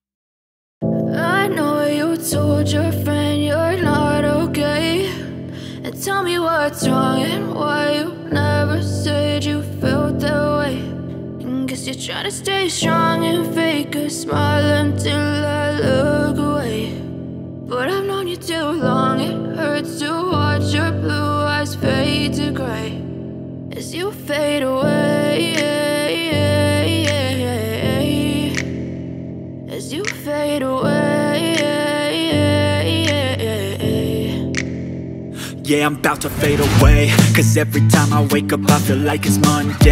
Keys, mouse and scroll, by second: 3.0 drag, 3.2 scroll down 6, 3.7 click, 5.7-6.7 drag, 7.0 click, 7.3-9.9 drag, 10.5-11.5 drag, 13.3 space, 13.4 Left, 13.7 Right, 14.7 click, 15.3-16.7 drag, 17.2 Left, 17.7 Right, 18.1 Left, 18.8 click, 20.1-21.1 drag, 21.4-22.4 drag, 22.8 click, 23.5 Right, 23.8 click, 24.7 Left, 24.9 Right, 25.4 space, 27.6 space, 28.0 click, 28.4 BackSpace, 29.0 shift+Right, 29.2 shift+Left, 29.9 shift+click, 31.0 shift+Left, 31.0 click, 31.7 Right, 31.8 Left, 32.0 Right, 32.6 shift+Left, 32.6 click, 33.2 Left, 33.4 shift+Right, 33.9 shift+click, 35.2 Left, 35.2 Right, 35.4 space, 35.9 click, 38.1 Left, 39.1-39.9 drag.